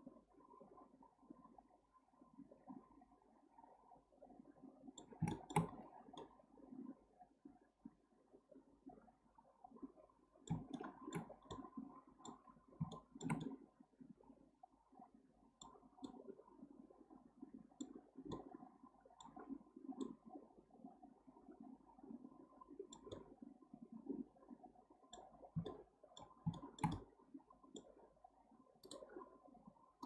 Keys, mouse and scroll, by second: 5.3-5.7 shift+middle drag, 5.7-6.2 scroll up 5, 6.2-9.2 middle drag, 10.7-11.3 shift+middle drag, 11.3 scroll down 2, 11.5-12.4 middle drag, 12.4-12.9 scroll up 2, 12.9-15.8 shift+middle drag, 15.8 scroll down 2, 16.0-18.0 middle drag, 18.0 scroll down 1, 18.3-19.7 middle drag, 19.7 scroll down 1, 20.0-23.0 middle drag, 23.1-25.3 middle drag, 25.3 scroll down 5, 25.6-28.9 shift+middle drag.